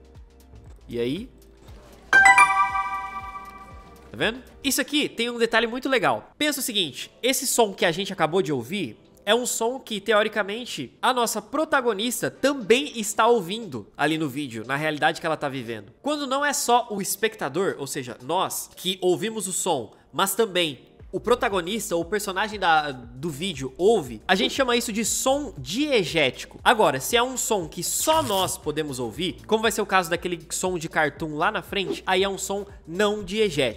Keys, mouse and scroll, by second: 1.4 space.